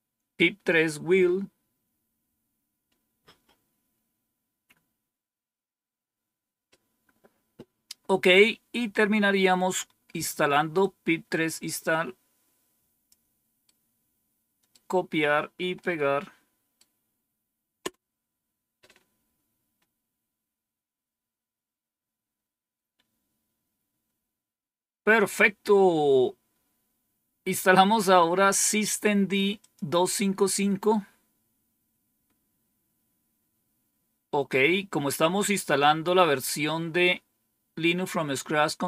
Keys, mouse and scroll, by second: 10.7-13.0 drag, 13.6-14.7 right drag, 13.9 click, 15.7-16.7 right drag, 17.7 Return, 29.5 click.